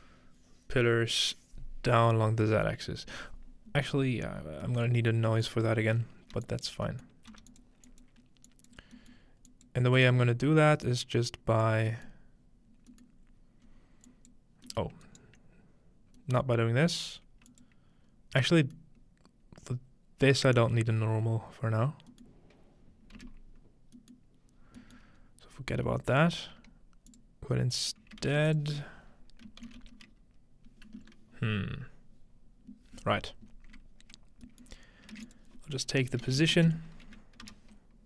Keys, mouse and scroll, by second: 4.0-4.5 scroll down 2, 4.9-6.1 middle drag, 5.7-6.3 scroll up 2, 6.4 drag, 6.8 scroll down 2, 7.3 g, 7.5 drag, 7.9 drag, 8.5 click, 8.8-10.4 scroll down 2, 9.5 click, 10.4-11.7 scroll up 2, 10.9 click, 11.7-12.5 scroll up 1, 13.1 scroll down 2, 13.7 scroll up 2, 14.1 click, 15.1-15.4 ctrl+scroll up 2, 15.2 ctrl+middle click, 17.5 click, 19.1 click, 22.3-23.9 middle drag, 23.2 x, 24.2-24.6 middle drag, 24.6-25.2 scroll down 1, 25.2 scroll up 2, 26.1 click, 28.2 shift+a, 28.5-30.2 drag, 29.5-30.9 typing, 34.2-35.3 scroll down 3, 35.1 shift+a, 35.3 shift+click, 36.2-37.0 typing, 37.4 Return.